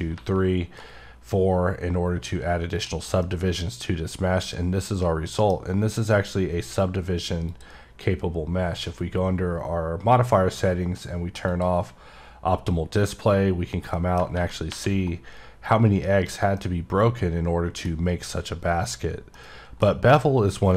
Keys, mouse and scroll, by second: 3.1 click, 3.2 middle click, 5.6 scroll up 1, 7.4 click, 8.8 scroll down 3, 9.6-10.5 scroll down 4, 10.5-11.1 scroll down 4, 11.5 click, 12.9 click, 13.6 scroll down 1, 13.9 middle click, 15.2-15.9 scroll up 3, 16.3 scroll down 1, 16.6 middle click, 19.3 middle click, 19.5 scroll down 1.